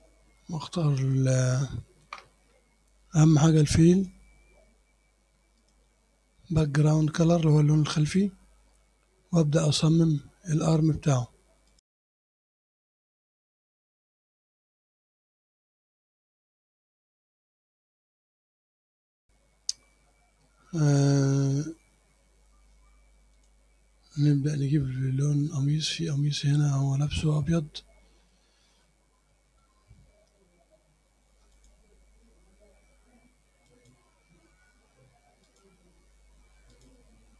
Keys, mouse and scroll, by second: 1.2 middle click, 4.0 click, 5.6 click, 9.9 scroll up 1, 11.7 click, 12.1 click, 12.7 click, 13.2 click, 13.3 middle click, 14.0 click, 14.3 click, 14.8 click, 15.0 click, 15.2 click, 15.3 middle click, 15.7 click, 16.0 click, 16.2 middle click, 17.0 click, 17.4 click, 18.0 click, 18.2 click, 18.6 click, 18.8 scroll down 1, 18.9 middle click, 23.4 click, 24.8 scroll up 1, 25.2 click, 25.3 middle click, 25.6 scroll up 1, 26.2-26.7 scroll down 2, 26.9 middle click, 27.6-28.3 scroll up 2, 28.4 middle click, 29.3 middle click, 29.8 scroll up 1, 30.0-31.6 scroll down 1, 31.6 click, 31.9-32.8 scroll down 1, 32.8-33.7 scroll down 1, 33.7 click, 34.1-35.5 scroll down 1, 35.5 click, 36.8 click, 37.1-37.3 scroll up 2.